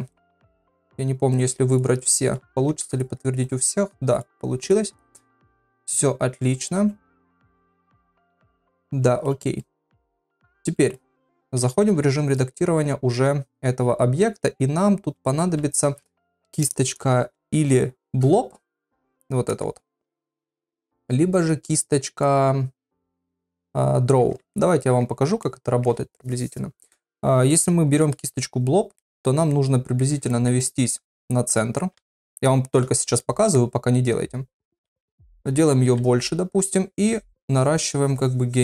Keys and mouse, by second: 0.1 shift+click, 0.5 shift+click, 0.9 shift+click, 1.3 shift+click, 2.3 click, 2.7 ctrl+a, 3.5 click, 4.6 click, 5.4-7.3 middle drag, 7.5 shift+middle click, 8.3-9.3 middle drag, 9.6 middle click, 10.7 shift+middle click, 11.6 ctrl+Tab, 19.6 click, 24.6 shift+middle click, 25.4 shift+middle click, 27.5 middle click, 29.0 middle click, 30.4 ctrl+middle click, 30.6 middle click, 32.0 ], 32.2 ], 32.3 ], 33.2 middle click, 33.2-35.8 ], 36.5-38.6 drag.